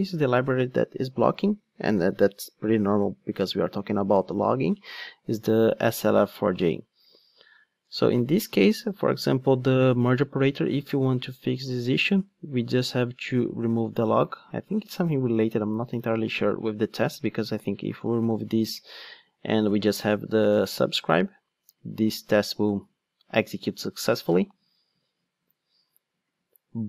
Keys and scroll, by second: 17.5 super+/, 20.9 ctrl+shift+d.